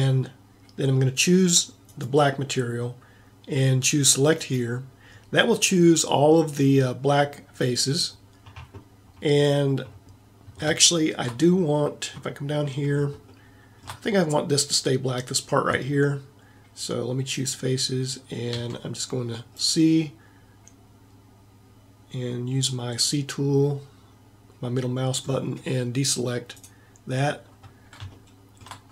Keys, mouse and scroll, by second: 11.1-12.3 middle drag, 12.4-14.4 middle drag, 17.6-18.7 drag, 18.7 c, 27.4 middle click.